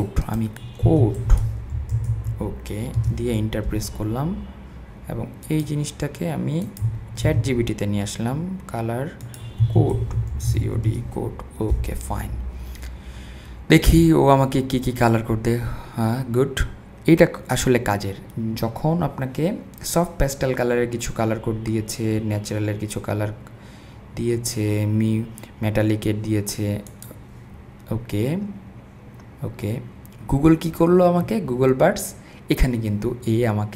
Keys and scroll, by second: 0.5 super+v, 0.8-2.6 typing, 3.0 Return, 7.2 super+v, 9.6-11.1 typing.